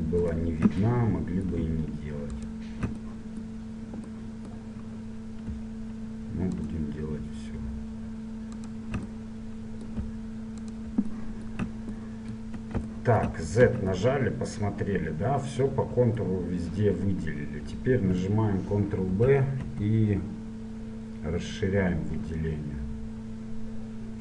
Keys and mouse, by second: 0.3-2.0 right drag, 2.0-3.8 middle drag, 3.8 right click, 4.3 click, 4.6-6.6 middle drag, 6.6-8.6 right drag, 8.8-10.5 right drag, 10.5 middle click, 10.8 right click, 11.2-13.7 middle drag, 13.7 z, 15.9 z, 16.4-19.2 middle drag, 19.2 ctrl+b.